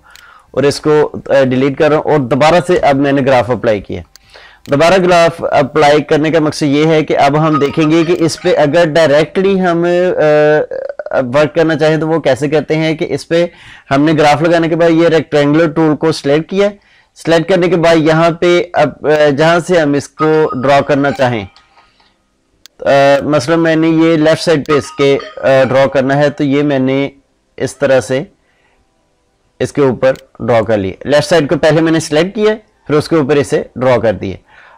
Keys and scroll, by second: 2.6 ctrl+shift+i, 21.4 ctrl+z.